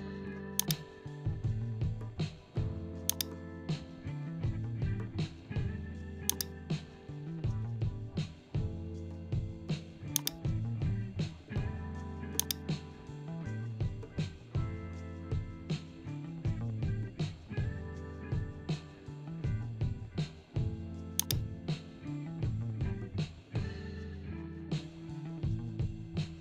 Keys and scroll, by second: 23.2 ctrl+0.